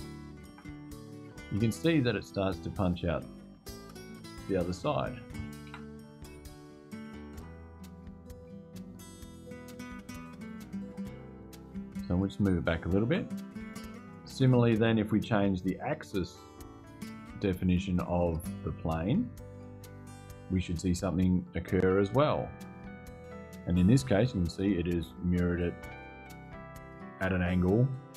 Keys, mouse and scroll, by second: 0.2 KP_Enter, 2.4 click, 3.8-4.5 scroll down 2, 5.4 Return, 10.7 click, 11.2-11.6 scroll up 1, 11.8 scroll down 1, 11.9-12.4 scroll up 1, 12.8 Return, 15.8 click, 19.8 click, 20.8 scroll up 2, 22.2 Return.